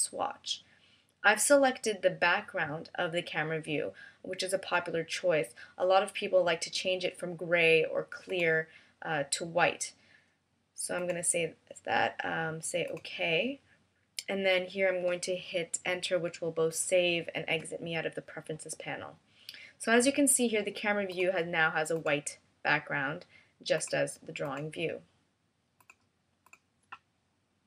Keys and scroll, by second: 17.4 Return.